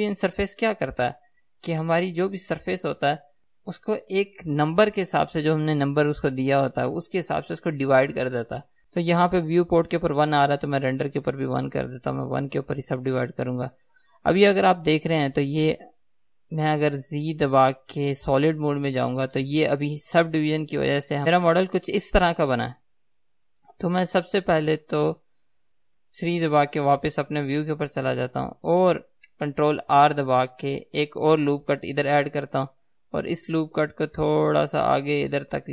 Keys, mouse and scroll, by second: 18.9 z, 19.5-35.7 middle drag, 27.3 KP_3, 30.9 ctrl+r.